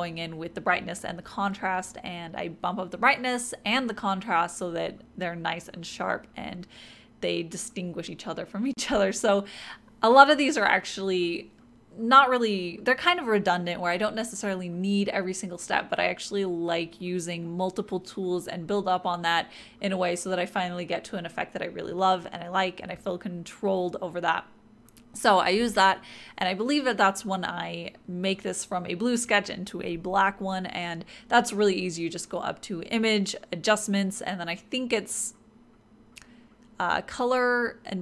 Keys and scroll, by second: 28.4 typing, 30.8-31.7 typing, 33.0 ].